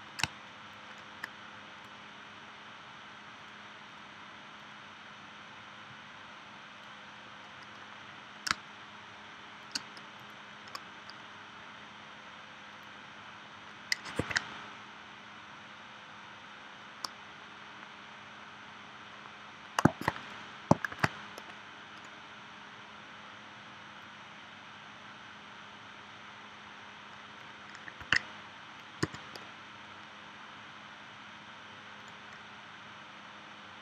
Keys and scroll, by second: 0.2 space, 8.5 space, 14.2 super+z, 20.9 shift+w, 28.0 super+z, 29.0 v.